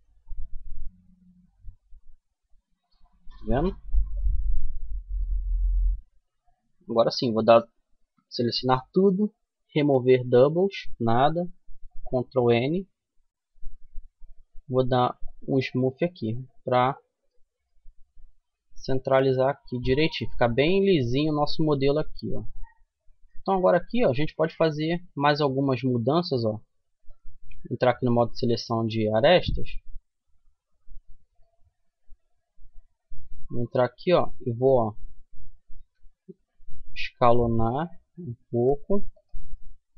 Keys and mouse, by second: 3.4-6.6 middle drag, 3.9 Tab, 5.3 a, 5.7 a, 7.1 w, 11.0 ctrl+n, 12.7 Tab, 14.4-16.3 drag, 16.3-18.9 middle drag, 19.7-22.7 middle drag, 22.7 Tab, 23.9 a, 25.1 middle click, 25.3 middle click, 27.1 click, 27.9-30.5 middle drag, 30.5-31.5 right drag, 31.5-32.5 middle drag, 34.9 s, 38.7-39.9 middle drag.